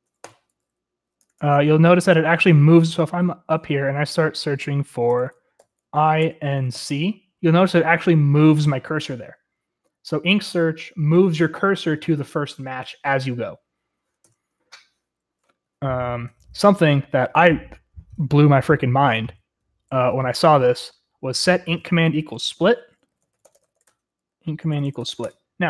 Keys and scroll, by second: 0.0-3.2 typing, 2.2 Escape, 4.9-6.8 typing, 14.3 Escape, 16.2 j, 16.4-16.8 j, 17.0-17.5 j, 19.4-20.4 typing, 22.9-25.6 typing.